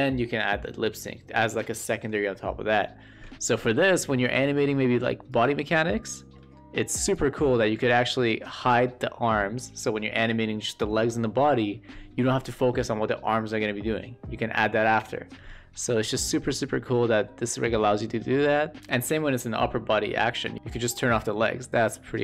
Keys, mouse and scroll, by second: 5.8-6.3 shift+middle drag, 7.2 click, 8.2 shift+middle drag, 16.0 shift+middle drag, 16.4-17.6 middle drag, 17.9 shift+middle click, 20.5-22.2 drag.